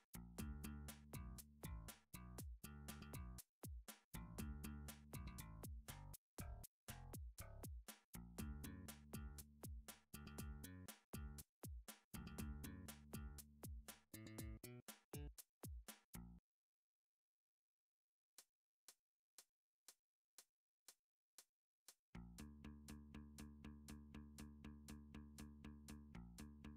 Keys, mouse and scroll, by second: 0.4 scroll up 5, 0.8-1.1 shift+middle click, 0.9 scroll, 1.5 shift+middle click, 5.5 click, 9.3 alt+click, 12.7 s, 13.1 z, 15.3 click, 15.6 g, 15.9 z, 16.9 click, 17.6 alt+click, 18.5 g, 19.1 click, 19.8 scroll, 20.1 middle click, 20.4-20.8 shift+middle click, 20.5 shift+middle click, 20.6 middle click, 21.6 g, 21.8 z, 23.4 g, 23.4 z, 23.5 g, 23.8 click, 23.8 z, 24.0-24.5 scroll, 26.3 scroll up 10.